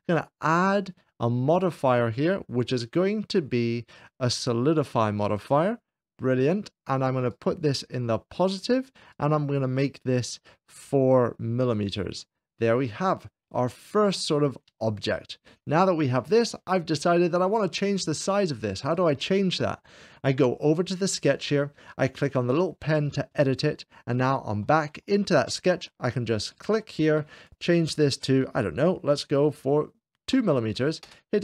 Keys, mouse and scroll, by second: 0.3-1.3 drag, 1.4 click, 5.1-6.1 drag, 7.1-8.2 drag, 8.1 1, 8.6-9.9 drag, 10.9 4, 11.6-12.6 drag, 12.7-15.6 middle drag, 18.7-19.8 drag, 23.1-24.2 drag, 24.4 middle click, 24.9 shift+middle click, 26.4-28.2 drag, 30.3 2, 31.1 Return.